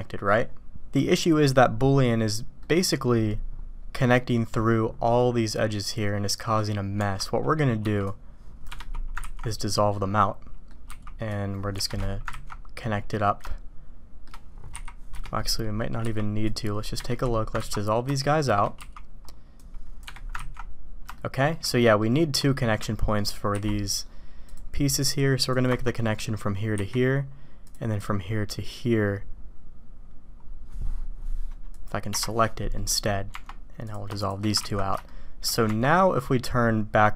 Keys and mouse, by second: 2.6 middle click, 7.8 c, 9.5 ctrl+x, 9.9-10.6 drag, 12.5 ctrl+x, 12.8 click, 13.4-14.3 shift+drag, 14.7 k, 15.4-15.8 drag, 16.0 c, 17.7 ctrl+x, 18.1 shift+click, 18.7 c, 20.5 ctrl+x, 21.1 shift+click, 21.8 click, 22.5 shift+click, 23.1 click, 32.7 middle click, 33.8 click, 34.1 shift+click, 34.8 ctrl+x, 35.0 shift+click, 35.7 Tab.